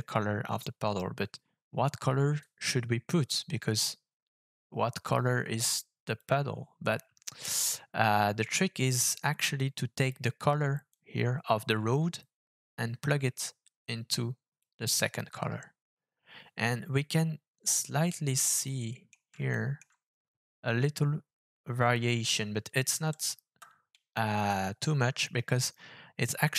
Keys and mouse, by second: 6.8 click, 9.6 click, 10.9-14.6 drag, 18.6-19.1 drag, 19.5 shift+middle click, 21.0-23.4 middle drag, 23.4 KP_0.